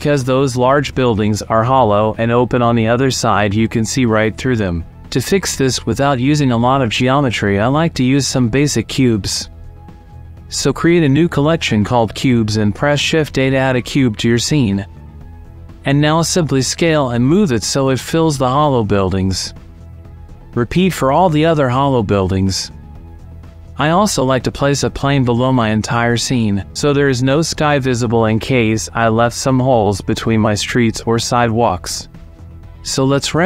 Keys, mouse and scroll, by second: 1.6 click, 2.0 middle click, 2.7 middle click, 3.6 click, 3.8 click, 4.0 middle click, 4.9 middle click, 5.3 shift+middle click, 5.7 middle click, 6.1 click, 6.1 right click, 6.5 middle drag, 6.9 middle click, 7.1 middle click, 9.1-9.6 middle drag, 9.8-10.1 shift+middle drag, 10.7 click, 12.2-13.4 drag, 14.6 shift+a, 16.8 s, 17.9 shift+middle click, 18.2 KP_5, 18.4 g, 19.4 middle click, 19.9 click, 20.3 shift+middle click, 20.7 s, 20.8 z, 21.0 click, 21.3 click, 21.4 click, 22.7 middle click, 22.8 shift+middle click, 22.9 middle click, 23.1 middle click, 23.3 alt+d, 23.3 y, 23.6 shift+click, 23.8 click, 24.2 click, 24.3 middle click, 24.9 middle click, 25.3 shift+click, 25.5 shift+a, 26.3 click, 26.5 s, 26.5 y, 27.1 click, 28.2 KP_5, 28.3 click, 28.8 click, 29.0 middle click, 31.1-32.8 drag, 32.8 ctrl+s, 33.4 F11.